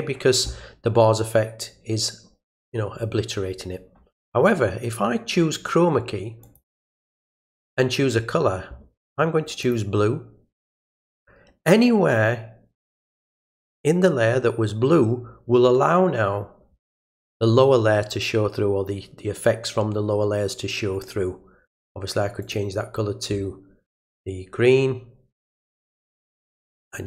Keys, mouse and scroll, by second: 6.4 click, 7.4 click, 9.6 click, 10.8 click, 22.4 click, 25.4 click, 26.2 click.